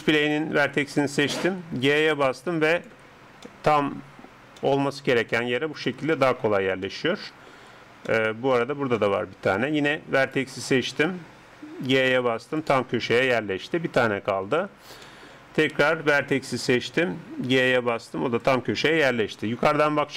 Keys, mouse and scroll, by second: 0.2 right click, 2.0 g, 3.1-3.6 scroll up 1, 3.6-11.8 middle drag, 10.2 right click, 11.9 g, 13.3-17.5 middle drag, 16.2 right click, 17.5 g, 19.7 KP_7.